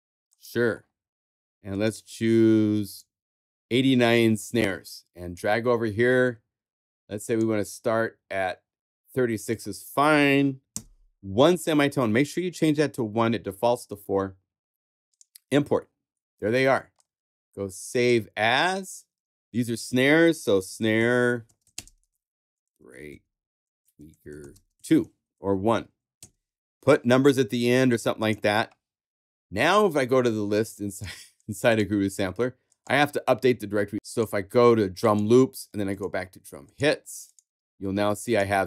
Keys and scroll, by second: 20.2-26.1 typing.